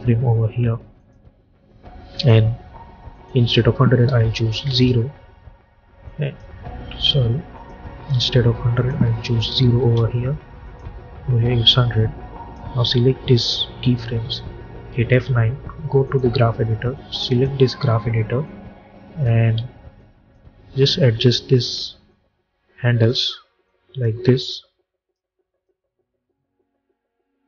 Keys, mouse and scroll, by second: 4.6 Return, 5.9 click, 6.9 ctrl+z, 7.4 click, 9.7 Return, 10.5 click, 10.9 k, 11.8-14.7 drag, 14.8 F9, 15.9-19.6 drag, 19.4 z, 19.9-22.0 drag, 22.0-23.5 drag, 23.5-25.5 drag, 25.5-27.4 drag.